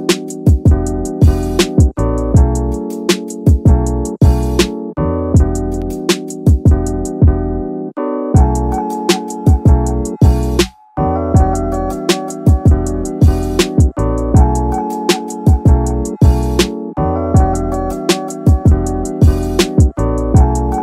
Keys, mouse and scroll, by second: 0.9 g, 2.3 g, 5.4 click, 5.7 middle click, 6.9 scroll up 1, 7.0 middle click, 7.7 middle click, 8.9 ctrl+r, 10.8 click, 11.4 middle click, 12.0-12.4 scroll down 2, 12.4 middle click, 12.9 middle click, 13.2 Tab, 13.4 middle drag, 15.4 click, 18.7-20.3 drag.